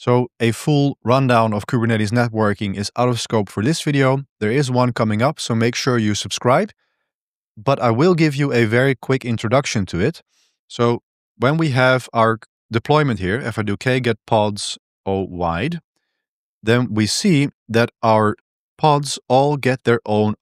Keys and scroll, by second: 11.1 ctrl+b, 11.3 2, 12.9-16.0 typing, 17.2 ctrl+-, 17.3 ctrl+-, 17.5 ctrl+-, 17.6 ctrl+-, 17.7 ctrl+-, 18.0 ctrl+-, 18.2 ctrl+-, 18.5 ctrl+-.